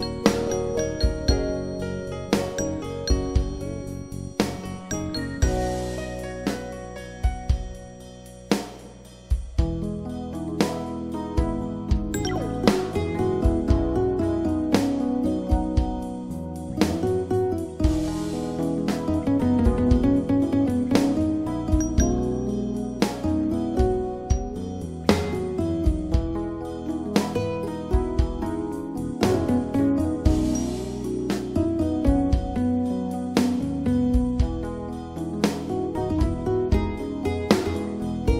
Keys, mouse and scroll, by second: 0.0-2.7 typing, 4.5-6.5 typing, 11.2 click, 26.4 click, 30.4 click, 32.0 click.